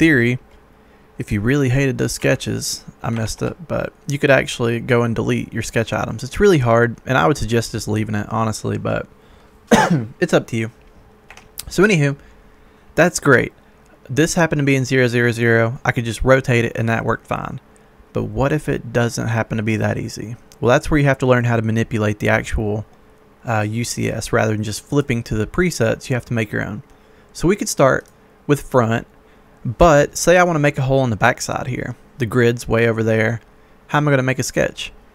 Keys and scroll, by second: 2.1 Delete, 3.3 ctrl+z, 11.3 Escape.